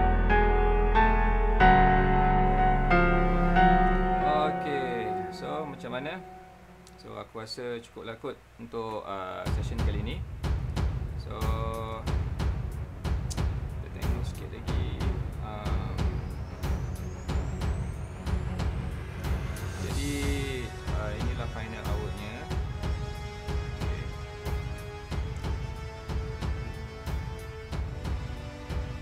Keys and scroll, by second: 11.2 space, 21.3 space, 21.8 super+space, 22.7 alt+super+space, 26.3 super+space, 27.4 alt+super+space, 28.0 alt+super+space, 28.1 alt+super+space, 28.4 alt+super+space.